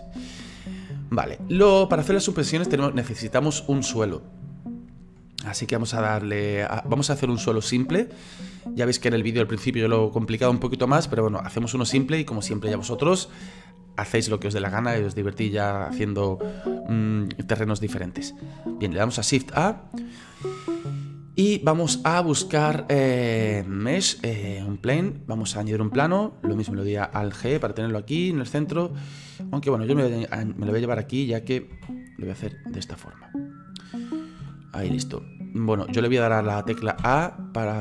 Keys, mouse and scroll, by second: 0.7 scroll down 1, 19.5 shift+a, 27.5 alt+g, 29.6-30.8 drag, 30.8-31.3 scroll down 6, 31.7 s, 33.8 scroll down 5, 34.4 s, 37.0 a.